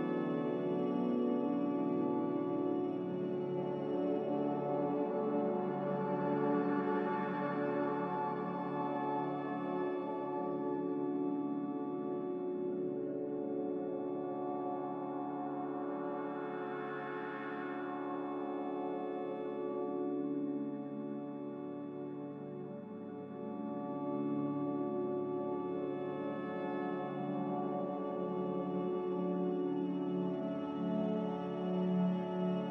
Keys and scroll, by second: 5.9 ctrl+z, 10.4 g, 16.8 Escape, 19.8 z, 20.8 Delete, 21.3 z, 22.3 g, 28.5 z, 32.5-32.7 typing.